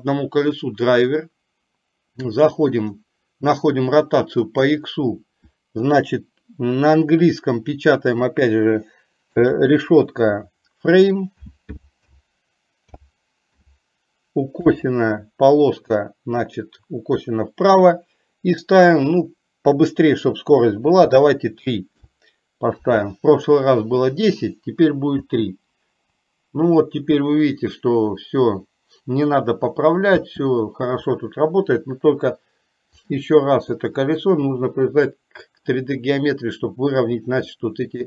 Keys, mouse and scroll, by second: 4.6-22.3 drag, 25.4 space, 30.5 space, 33.0-35.4 drag, 37.6 shift+middle click.